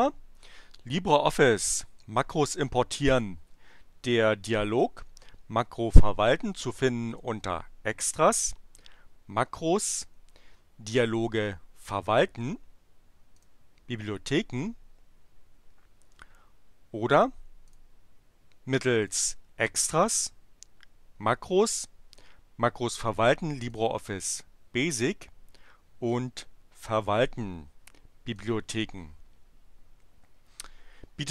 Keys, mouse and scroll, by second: 7.0 click, 11.4 click, 13.3 click, 17.7 click, 19.0 click, 23.6 click, 26.1 click, 28.2 click.